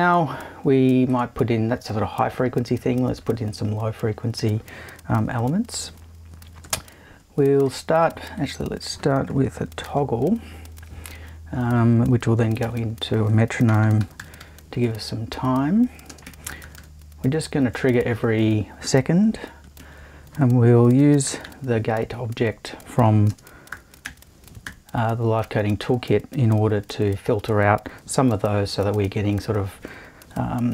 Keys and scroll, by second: 6.8 super+i, 9.3 BackSpace, 9.8 shift+super+t, 12.6 super+i, 13.6-14.9 typing, 16.0-17.0 typing, 19.8 super+i, 20.7-21.9 typing, 23.3 space, 23.7 0, 24.0 ., 24.6 3.